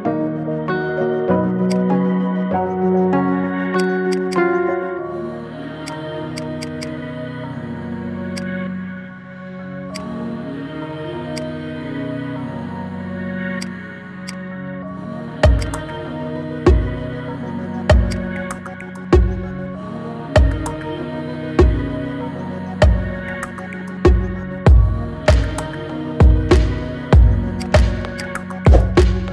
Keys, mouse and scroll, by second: 0.0 ctrl+b, 1.9 scroll down 3, 2.1-3.1 middle drag, 3.1-3.8 scroll up 2, 3.8 click, 4.1 alt+shift+click, 4.9 ctrl+b, 6.3 click, 6.5 alt+shift+click, 6.7 alt+shift+click, 7.3 ctrl+b, 8.5-9.9 middle drag, 9.9 click, 10.2-11.3 middle drag, 11.3 click, 12.0 Tab, 13.5 click, 14.3 click, 15.6 click, 16.0-18.1 middle drag, 18.1-20.6 drag, 20.8-24.0 middle drag, 24.0-25.3 scroll up 1, 25.7-27.5 middle drag, 27.5-28.6 drag, 28.6-29.3 middle drag.